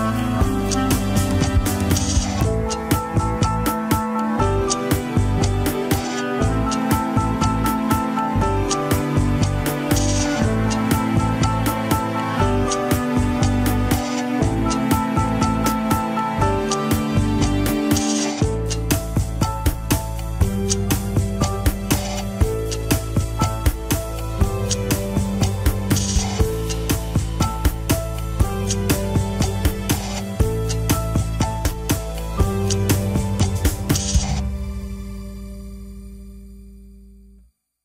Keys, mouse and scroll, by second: 3.5 ctrl+s, 5.7 a, 6.0 alt+r, 6.4 scroll down 4, 7.5-8.1 drag, 8.1 scroll up 3, 8.5 g, 11.4 scroll up 5, 12.1 ctrl+Tab, 12.2 shift+click, 12.6 ctrl+Tab, 13.3 alt+z, 14.3 ctrl+click, 14.3 alt+z, 14.6 scroll down 1, 15.4 alt+z, 16.9 ctrl+click, 18.6 ctrl+click, 19.0 alt+z, 19.4-21.2 middle drag, 21.2 click, 22.1 scroll down 2, 22.6-24.0 drag, 24.0 scroll up 3, 24.4 click, 25.0-26.3 middle drag, 26.3-27.3 drag, 27.3-27.7 scroll down 2, 27.7 click, 28.3 middle click, 29.3-30.3 drag, 30.3 middle click, 30.7 scroll up 2, 31.2 click, 32.0 middle click, 32.9-35.5 drag, 35.5 middle click, 36.4 click, 36.9 middle click.